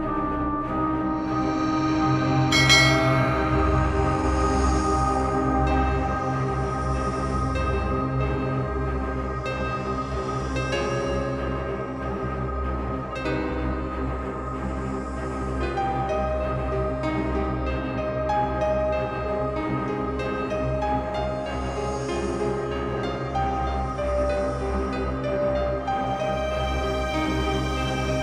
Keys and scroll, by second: 0.8 space, 20.5 ctrl+t, 24.9 Left.